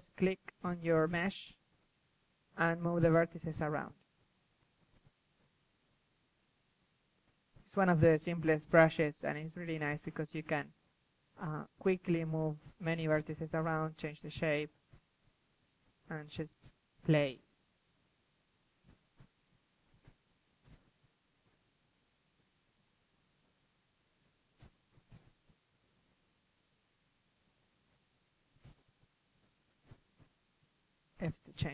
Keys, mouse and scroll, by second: 0.3 f, 3.3-9.4 drag, 9.4 f, 12.8-18.9 drag, 16.4 KP_1, 19.1-20.1 drag, 19.2 KP_3, 22.5-25.3 drag, 24.8 KP_3, 25.3 middle drag, 25.9 KP_1, 26.1 KP_3, 27.0-30.8 drag, 29.8 KP_1, 30.2 KP_3, 31.6 ctrl+z.